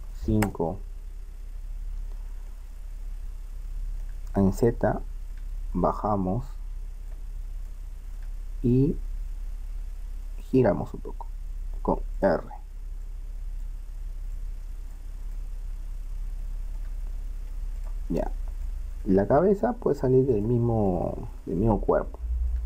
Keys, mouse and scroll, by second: 2.5-5.9 middle drag, 5.9-7.7 drag, 7.7-9.7 middle drag, 9.3 r, 13.0-15.4 drag, 15.4 middle click, 17.8-19.6 right drag, 20.4-22.3 middle drag.